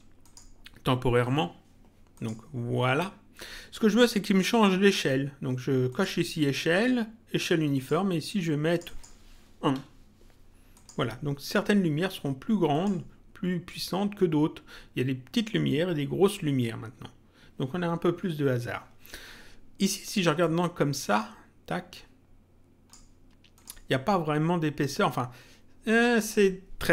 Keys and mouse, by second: 2.1 click, 5.8 click, 7.7 click, 10.7 click, 12.7 click, 20.3 click, 23.5 click.